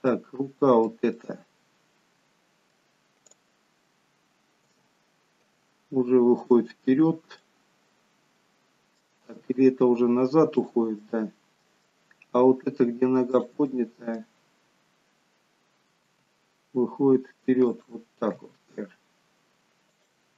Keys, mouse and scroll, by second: 0.0 middle click, 5.4 click, 5.4 g, 7.4 middle click, 9.3 g, 11.0 middle click, 13.3 click, 13.6 middle click, 16.0 g, 18.4 r.